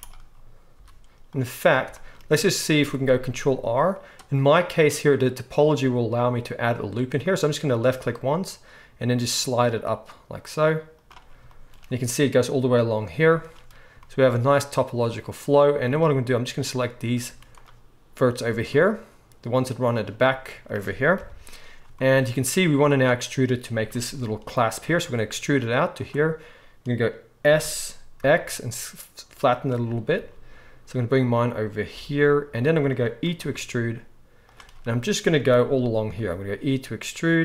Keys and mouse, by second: 0.7 z, 3.1 ctrl+r, 11.0-16.6 middle drag, 15.7 z, 16.6-26.0 drag, 17.3 z, 19.2-21.2 middle drag, 21.2 KP_1, 24.9 e, 26.0-37.4 middle drag, 27.4 s, 30.1 g, 31.9 g, 33.4 e, 36.1 e.